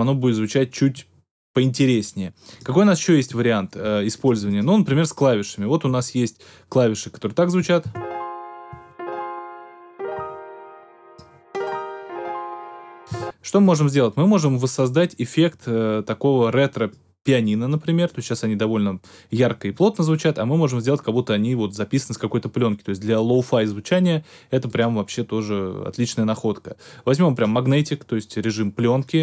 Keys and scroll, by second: 7.8 space, 13.1 space.